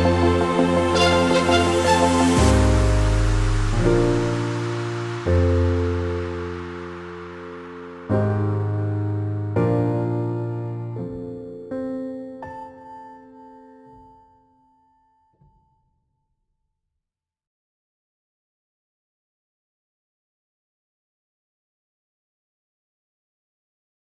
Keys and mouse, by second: 2.3-4.9 alt+drag, 5.6 space, 6.3 click, 6.4-7.7 alt+drag, 8.0-9.3 alt+drag, 11.2 shift+click, 11.6 Down, 12.6 Right, 12.9 Down, 13.6 click, 14.2 shift+click, 14.6 Up, 15.2 Right, 15.6 Down, 16.2 click, 19.5 click, 21.1-21.8 alt+click, 21.9 click, 22.1 space, 22.4 click, 22.5 space, 22.9 click.